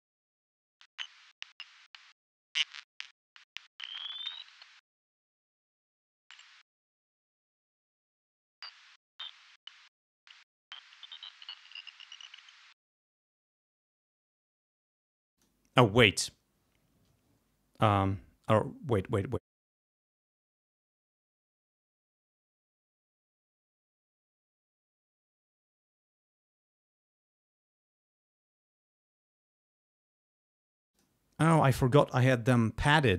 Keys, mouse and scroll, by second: 0.0 space, 14.0 click, 15.3 click, 19.3 click, 30.9 click.